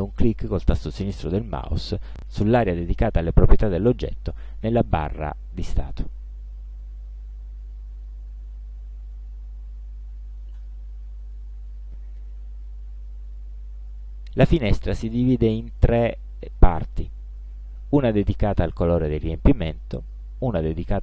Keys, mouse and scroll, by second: 3.3 click, 10.7 click, 15.9 click, 16.5 click, 17.5 click, 20.1 click.